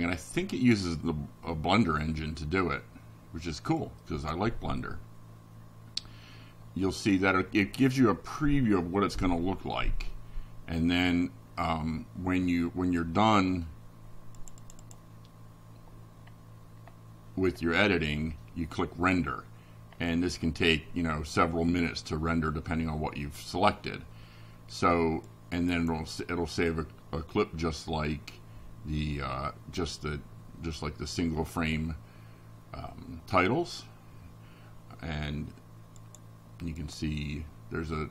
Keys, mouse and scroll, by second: 9.1 click, 9.8 click, 16.8 click, 24.0 click, 33.1 click, 35.1 click, 36.1 click, 37.1 click.